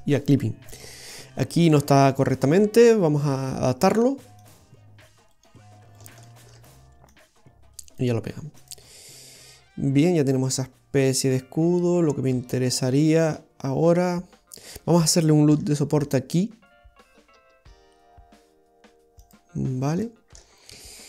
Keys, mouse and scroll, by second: 3.3 right click, 4.5 click, 5.4 right click, 6.0 alt+shift+right click, 7.1 click, 8.6 click, 15.7 ctrl+r, 19.7-20.0 scroll up 1, 20.1 shift+middle click, 20.6-21.0 scroll up 4.